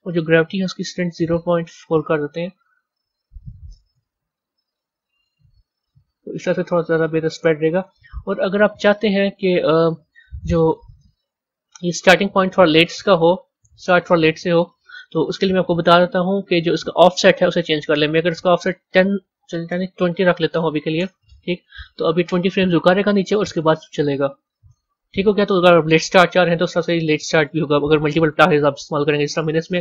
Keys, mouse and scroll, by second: 0.0-6.7 drag, 7.8-10.8 drag, 10.9 z, 11.8 click, 13.3 click, 14.9 click, 15.6 click, 18.0-21.0 drag, 23.4-25.1 drag, 27.2-29.8 drag.